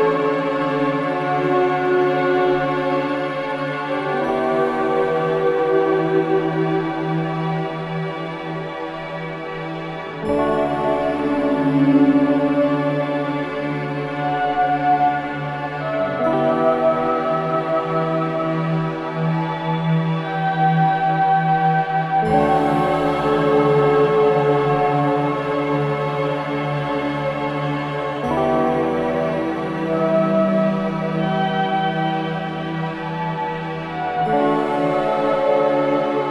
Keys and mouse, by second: 0.7 click, 1.2-2.0 typing, 2.5 alt+click, 3.0 alt+shift+click, 3.6 ctrl+alt+click, 4.1-6.2 typing, 4.2 alt+click, 8.9 Tab, 10.1 Tab, 11.7-13.3 drag, 15.2 click, 16.3 click, 17.3 KP_Divide, 19.1 shift+s, 19.8 click, 22.0 Tab, 23.0-23.8 drag, 25.2-25.8 drag, 27.1 e, 27.3 r, 27.6 x, 28.6 Escape, 31.3-34.9 drag.